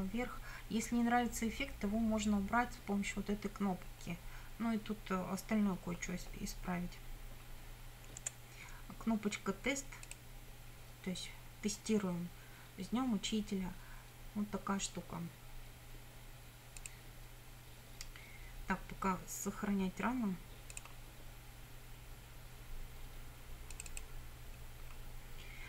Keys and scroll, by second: 8.3 F9.